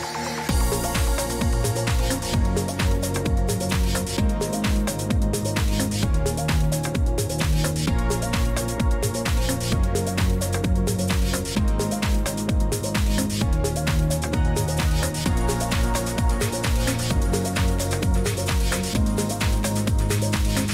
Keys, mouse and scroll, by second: 0.0-20.7 typing, 11.2 click, 13.8 click, 14.8 click, 15.3 click, 16.5 click, 19.6 click.